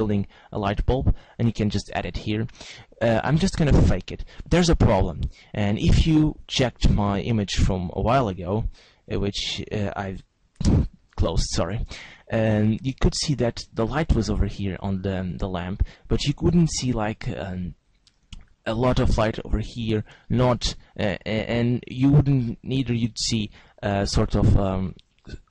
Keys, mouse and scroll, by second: 4.6 shift+a, 15.8-17.5 scroll up 1, 17.5-17.8 scroll up 1, 22.2 click, 23.3 click.